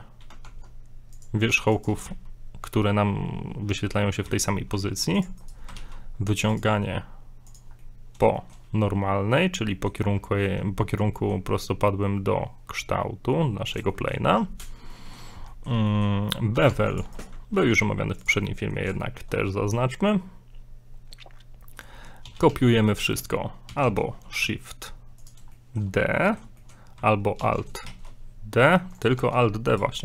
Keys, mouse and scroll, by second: 0.4 ctrl+Tab, 1.5 ctrl+Tab, 2.1 z, 4.3 z, 4.8 ctrl+Tab, 5.4 right click, 5.8 alt+e, 7.8 middle click, 8.3 shift+middle click, 9.7 middle click, 11.1 shift+middle click, 13.1 scroll down 1, 13.9 shift+middle click, 14.9 shift+middle click, 15.7 middle click, 15.9 shift+middle click, 16.7 ctrl+Tab, 17.2 right click, 17.6 ctrl+b, 18.5 middle click, 19.0 shift+middle click, 22.3 a, 22.5 a, 22.7 middle click, 23.7 shift+d, 25.5 shift+middle click, 26.2 middle click, 26.6 shift+middle click, 27.4 alt+d, 29.2 Tab, 29.7 right click.